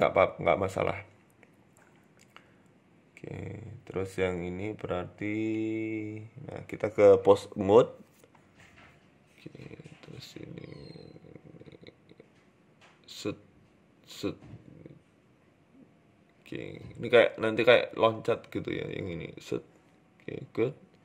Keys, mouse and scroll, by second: 0.5 KP_7, 1.0-2.1 scroll down 3, 1.2 shift+middle click, 2.1 middle click, 2.9 KP_3, 3.3-3.6 scroll up 4, 3.6 Tab, 3.8 Tab, 4.3 right click, 4.9 click, 5.8 shift+middle click, 6.2-6.9 scroll up 2, 6.6 click, 7.3 r, 8.8 middle click, 9.5 KP_1, 9.9-10.5 scroll down 10, 10.3-11.1 scroll up 6, 10.5 shift+middle click, 11.5 right click, 12.2 right click, 12.7 r, 13.6 right click, 13.7 r, 14.8 right click, 14.9 r, 15.9 right click, 15.9 r, 16.7 right click, 16.9 r, 17.8 right click, 18.1 r, 19.2 right click, 19.3 r, 20.4 right click, 20.5 r.